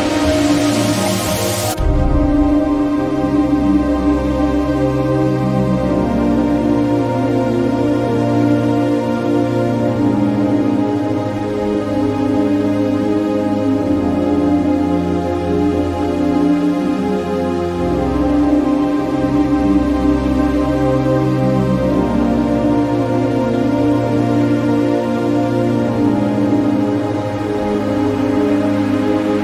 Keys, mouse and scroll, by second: 0.1 click, 4.4-17.3 drag, 17.5-22.4 drag, 22.9 click, 26.3-29.2 drag.